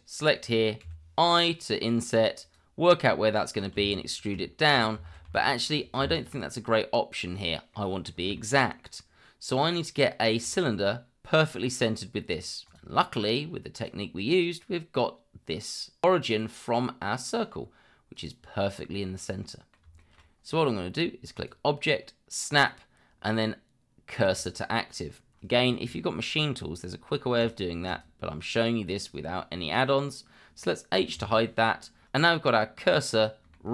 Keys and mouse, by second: 0.8 i, 3.7 e, 5.1 ctrl+z, 6.0 Tab, 7.7-8.0 middle drag, 8.3-8.6 shift+middle drag, 10.4 click, 12.6 click, 13.7 click, 16.4-17.3 middle drag, 18.1 click, 19.1-19.7 middle drag, 20.0 shift+middle drag, 21.3-24.5 drag, 27.4 click, 27.9 click, 31.1 h, 32.4-33.7 middle drag.